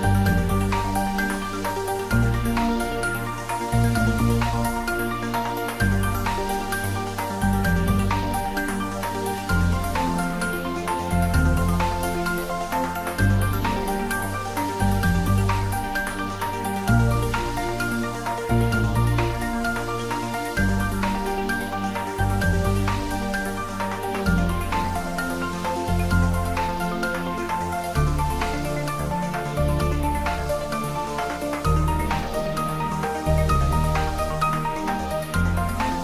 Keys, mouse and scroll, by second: 0.7-6.9 drag, 11.5 scroll down 1, 11.8 middle click, 12.8-13.1 scroll up 1, 15.1 click, 16.6-18.6 middle drag, 19.6 click, 20.1 Tab, 20.5-20.9 scroll up 1, 20.9-22.7 middle drag, 22.7 ctrl+3, 24.5 Tab, 25.9 ctrl+r, 29.4 click, 33.2 ctrl+z, 34.3 ctrl+r.